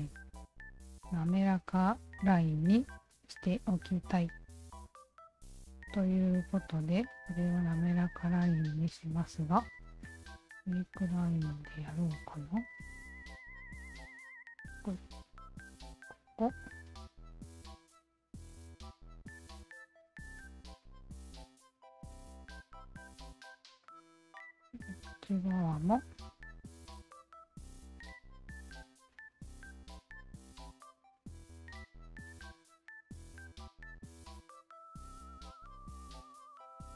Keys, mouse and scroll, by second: 0.3-0.6 alt+drag, 1.0 alt+click, 2.2 Tab, 2.8 alt+click, 4.4 d, 4.9-6.6 alt+drag, 7.2 ctrl+s, 8.9 shift+q, 10.0 alt+click, 10.9 ctrl+s, 10.9 right click, 11.5 alt+click, 13.1 alt+click, 14.5 alt+click, 16.0 alt+click, 17.7 alt+click, 19.0 alt+click, 20.6 alt+click, 21.7 alt+click, 22.8 Return, 23.8-25.0 alt+drag, 26.5 click, 28.2 alt+click, 29.1 alt+click, 30.7 alt+click, 31.9 alt+click, 33.1 alt+click, 34.5 alt+click, 35.9 Return, 36.8 q.